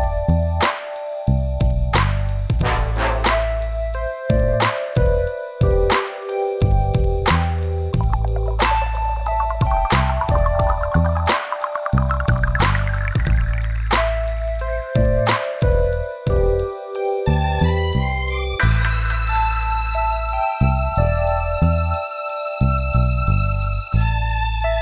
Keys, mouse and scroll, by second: 0.4 middle click, 2.3 click, 2.9 click, 3.8 click, 4.6 scroll up 2, 5.8 click, 6.6 click, 7.5 click, 8.5 click, 8.6 click, 9.0 click, 9.1 click, 9.8 click, 10.1 scroll down 2, 11.0 click, 13.5 scroll down 2, 15.6 middle click, 17.3 click, 22.0 click, 22.5 click, 24.0 click.